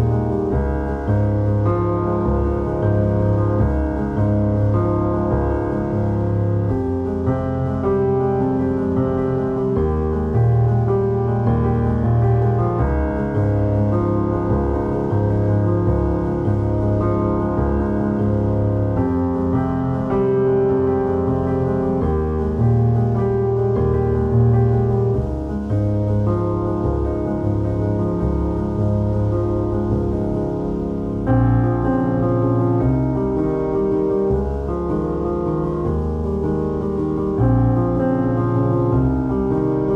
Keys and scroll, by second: 24.3 ctrl+0, 24.8 ctrl+-, 30.7 ctrl+=, 38.4 ctrl+i.